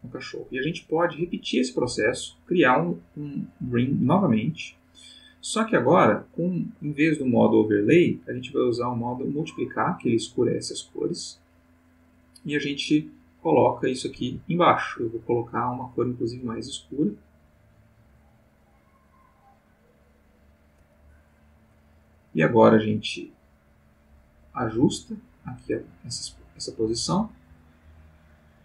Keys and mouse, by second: 1.6 click, 2.1 click, 3.8 click, 8.1 click, 9.4 click, 12.1-14.6 drag, 14.2 Escape, 14.9 click, 16.4-19.4 drag, 19.6 click, 22.9-24.9 drag, 25.1-28.6 drag.